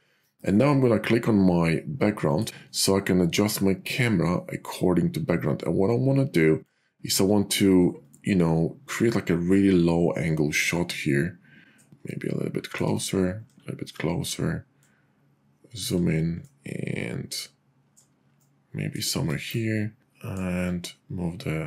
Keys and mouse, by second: 2.2 click, 3.7 middle click, 4.2-6.7 drag, 10.8-11.8 drag, 14.8 click, 16.5-18.0 drag, 20.0 click.